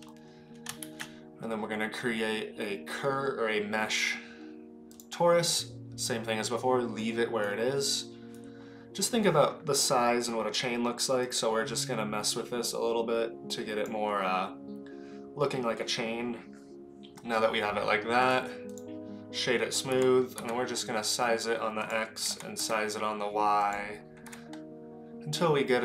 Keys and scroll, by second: 0.8 shift+a, 20.4 s, 21.8 s, 22.2 s, 24.2 s.